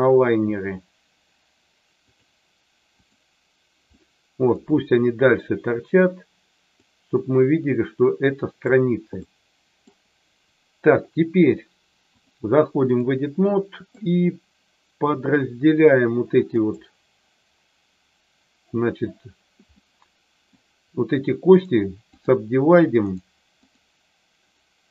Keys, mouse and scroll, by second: 3.9 middle click, 6.8-8.7 drag, 9.2 middle click, 12.1-13.1 drag, 13.3 middle click, 16.6-19.5 right drag, 19.7 middle click, 21.6 right click, 23.1 right click, 24.6 right click.